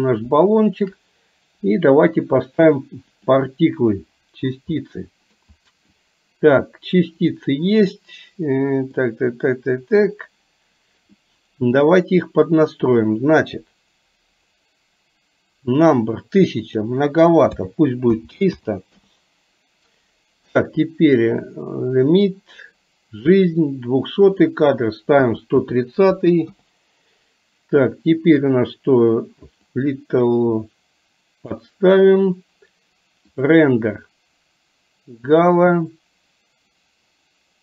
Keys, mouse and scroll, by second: 0.6 shift+middle click, 2.2 click, 4.8-5.3 middle drag, 8.6 middle click, 16.7-19.0 drag, 24.5-26.6 drag, 29.8-31.7 drag.